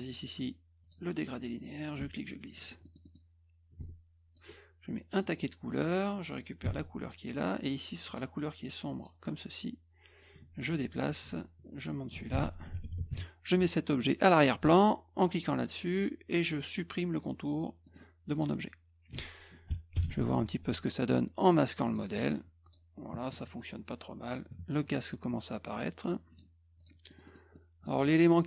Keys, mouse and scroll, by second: 0.8 click, 1.9 ctrl+click, 2.9 middle click, 2.9 scroll, 3.1 middle click, 3.8 ctrl+click, 5.1 click, 5.3 click, 5.8 click, 7.0 click, 8.1 click, 9.0 click, 10.2 click, 11.7 ctrl+click, 12.3 F1, 15.3 click, 17.9 scroll down 2, 18.4 click, 20.0 ctrl+shift+l, 21.9 click, 22.7 click, 26.3 click, 26.8 click, 27.1 middle click, 27.1 scroll up 2, 27.3 middle click, 27.6 middle click.